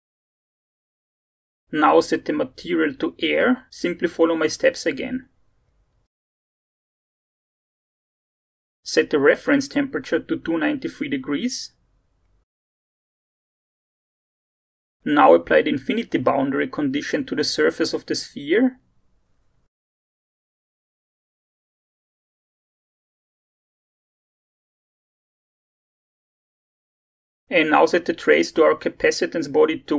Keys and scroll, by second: 12.5 2, 12.7 9, 13.0 3, 21.7-23.4 typing.